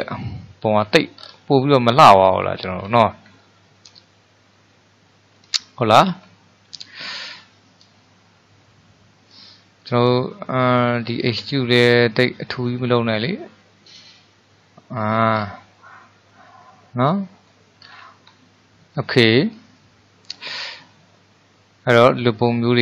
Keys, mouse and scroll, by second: 0.3-1.3 middle drag, 1.3-1.7 scroll down 1, 1.7-2.8 middle drag, 2.8-3.5 scroll up 3, 3.5-6.3 shift+middle drag, 6.3-7.8 scroll up 1, 7.8-14.0 drag, 15.5 scroll down 2, 15.6 scroll up 1, 15.8-17.9 middle drag, 17.9-18.5 scroll up 4, 18.5-22.8 shift+middle drag.